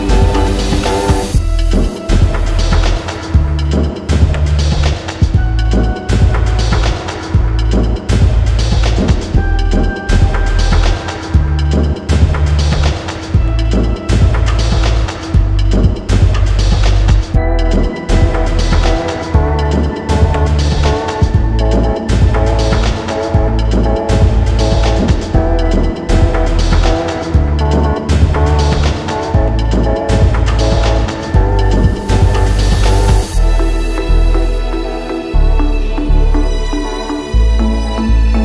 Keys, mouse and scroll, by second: 0.0 click, 0.4 Return, 2.3-4.3 scroll down 13, 4.9 alt+click, 5.4-6.5 scroll up 11, 6.1 ctrl+t, 9.4 shift+click, 10.9 click, 11.2 Return, 12.1-13.1 alt+scroll down 9, 13.1 scroll down 1, 13.7 alt+click, 14.9 click, 15.9 click, 19.1 click, 20.4 click, 21.2 click, 22.6 click, 23.8-25.5 scroll down 8, 26.3 alt+click, 26.7 ctrl+t, 28.8 shift+click, 29.3 Return, 30.0-31.5 scroll down 7, 32.0-32.7 scroll down 1, 34.2 alt+click, 34.8 t, 36.4 ctrl+t, 38.1-38.4 shift+drag.